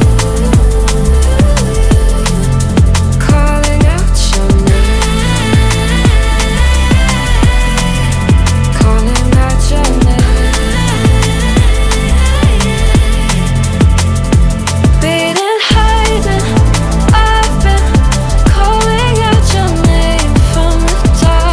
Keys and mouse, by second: 0.4 ctrl+middle click, 0.7 middle click, 1.9-3.3 middle drag, 4.1 click, 5.3-6.4 middle drag, 6.6 middle click, 7.7 ctrl+middle click, 8.0 middle click, 8.6 ctrl+shift+click, 9.5-10.5 middle drag, 11.0 middle click, 12.0 click, 12.4 click, 14.5 click, 15.3 click, 19.3-19.7 middle drag, 20.1 ctrl+middle drag, 20.5-21.0 middle drag, 21.4 middle drag.